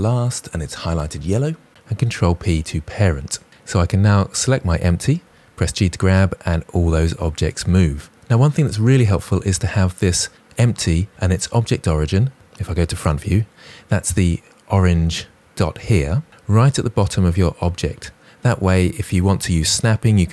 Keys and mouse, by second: 1.8 ctrl+p, 3.6 click, 5.1 g, 11.1 KP_1.